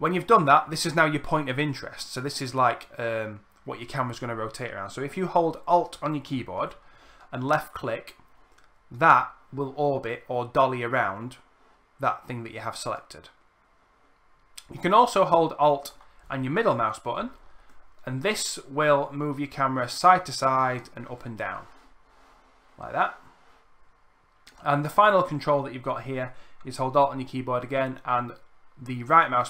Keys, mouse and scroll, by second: 5.6-14.4 alt+drag, 15.5-24.2 alt+middle drag, 26.9-29.4 alt+right drag.